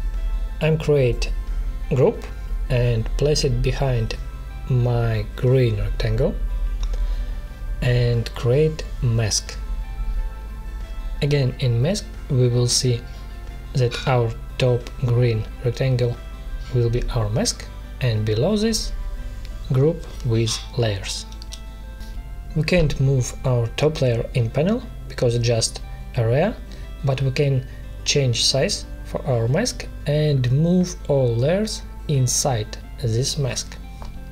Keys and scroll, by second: 1.8 ctrl+g, 8.4 ctrl+shift+], 13.6 ctrl+shift+m, 20.1 ctrl+[, 20.8 ctrl+], 31.3 ctrl+z, 34.1 space.